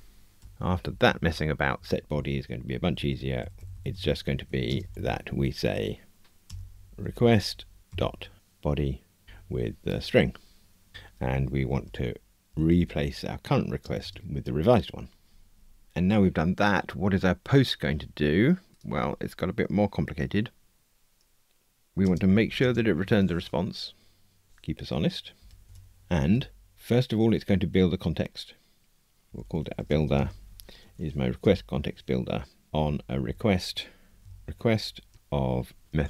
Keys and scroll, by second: 2.8 alt+shift+Left, 9.2 Return, 10.9 Escape, 26.7 Tab, 31.4 Tab, 33.2 alt+shift+Left, 34.2 Return.